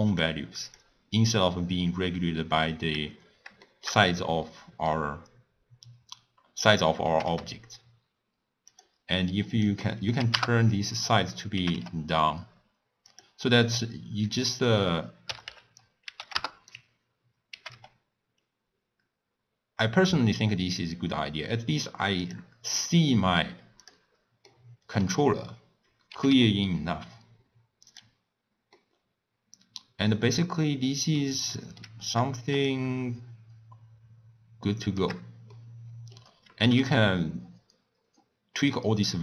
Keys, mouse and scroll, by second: 0.3 click, 2.5-3.1 scroll down 1, 3.2-3.7 scroll down 1, 3.7-7.1 shift+middle drag, 7.1 g, 9.5-11.6 drag, 11.6 g, 14.7-17.6 drag, 17.6 g, 22.8-23.8 middle drag, 23.8 click, 24.5-26.2 middle drag, 26.2 g, 28.3-28.8 scroll down 1, 28.8-32.7 middle drag, 32.7-35.6 shift+drag, 35.6-36.7 middle drag, 36.7 g.